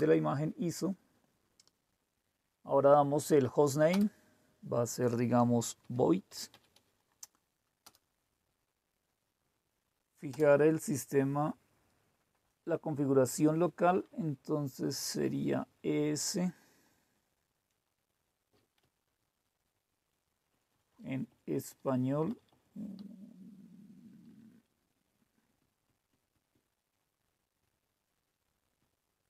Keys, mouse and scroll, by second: 0.0 Return, 3.9 Return, 5.6-7.1 typing, 7.8 Return, 10.3 Return, 14.1 Down, 14.6 Down, 14.7 Down, 14.7 Down, 18.7-20.0 Up, 20.5 Up, 20.6 Up, 20.8 Up, 21.0 Up, 21.2 Up, 21.4 Up, 21.6 Up, 21.8 Up, 22.2 Up, 22.6 Up, 22.9 Down, 23.5-23.9 Down, 24.2 Down, 24.7 Down, 25.5 Down, 25.8 Down, 26.0 Down, 26.3 Down, 26.5 Down, 27.1-28.2 Down, 28.7 Down.